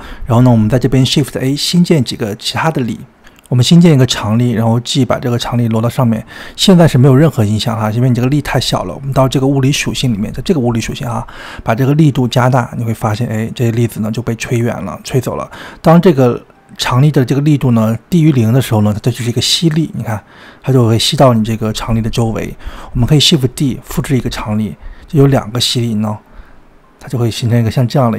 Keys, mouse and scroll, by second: 0.1-1.3 middle drag, 1.3 shift+a, 5.0 g, 8.4 click, 9.8 drag, 10.4 click, 13.0-16.0 drag, 17.4-20.4 drag, 23.5 click, 25.0 shift+d.